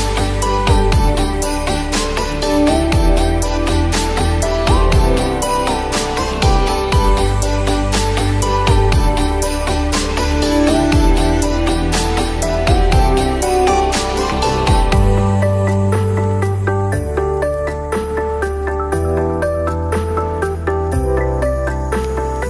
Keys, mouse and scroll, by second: 2.7 click, 3.8 ctrl+t, 5.2-9.6 drag, 12.1-13.6 drag, 14.7 ctrl+t, 15.1 click, 15.1-16.5 drag, 17.8 alt+click, 18.9 click.